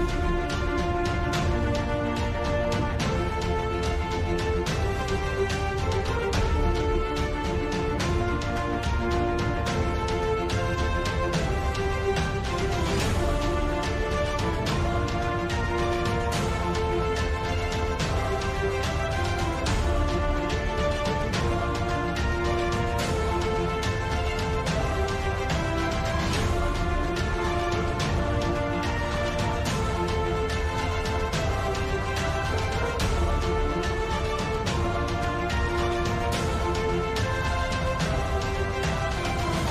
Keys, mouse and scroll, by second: 1.3 f, 4.0 ctrl+z, 4.2 KP_7, 4.3 KP_5, 5.0 f, 5.6-6.1 drag, 6.1 ctrl+z, 6.3 shift+f, 7.0 click, 7.9 ctrl+z, 8.5 KP_5, 9.5 Tab, 10.0 w, 10.6 Tab, 11.4 ctrl+2, 12.5 middle drag, 13.2 middle click, 13.4 KP_7, 14.9 shift+f, 16.1 f, 16.6-17.0 drag, 17.2 ctrl+z, 17.5 click, 17.9 ctrl+z, 18.6 middle click, 18.8-20.1 typing, 21.2 shift+f, 22.8-23.5 drag, 23.5 ctrl+z, 23.9 KP_7, 24.9-25.3 drag, 25.7-26.2 drag, 26.5-27.4 drag, 27.4 ctrl+z, 27.6 ctrl+z, 28.1 shift+f, 28.7 click, 28.9 f, 29.6-30.3 drag, 30.3 ctrl+z, 30.5 ctrl+z, 31.1-34.9 drag, 34.9 ctrl+z, 35.3 f, 35.9-37.1 drag, 37.5 middle drag, 37.7 middle drag, 39.5-39.7 drag.